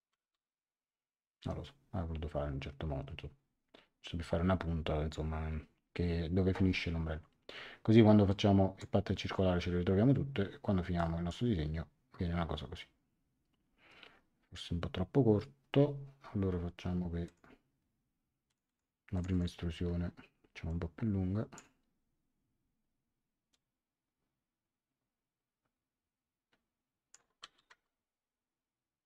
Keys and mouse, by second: 0.2 Return, 8.2 click, 10.9 click, 17.2 click, 18.4 click, 20.6 click, 23.5 click, 27.7 Return.